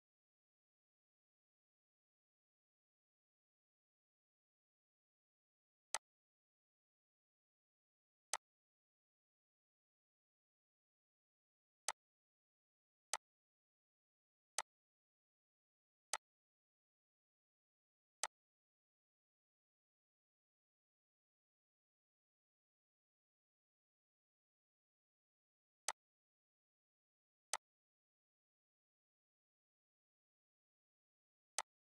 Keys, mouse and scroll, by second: 8.3 click, 10.1 right click, 11.9-30.6 drag, 31.5 click.